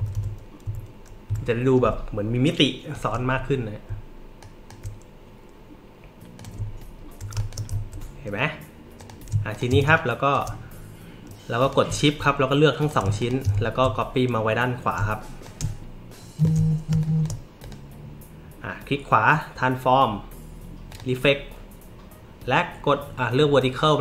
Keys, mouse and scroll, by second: 0.0 Up, 0.0 Right, 0.1 Up, 0.6 Left, 1.3 Right, 4.4 alt+click, 6.3 click, 6.7-7.0 alt+scroll up 2, 7.3 click, 7.3 space, 9.0 click, 9.5 shift+click, 9.8 space, 9.9 click, 11.6 click, 12.0 alt+middle click, 12.0 alt+scroll, 12.8 click, 13.2 shift+click, 13.6 alt+scroll up 2, 15.4-16.4 alt+shift+drag, 16.9 space, 17.0 click, 17.6 right click.